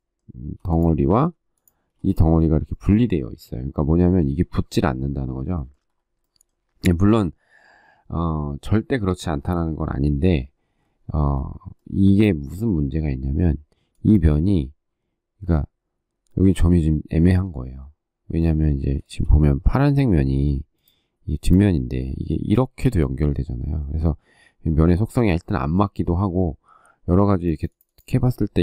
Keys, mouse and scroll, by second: 0.2 m, 1.7 ctrl+space, 18.8 shift+middle click.